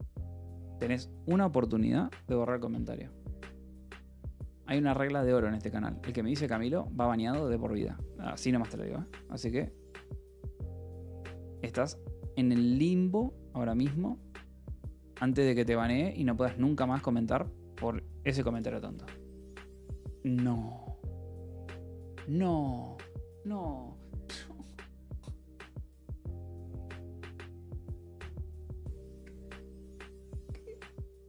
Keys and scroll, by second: 19.7 l.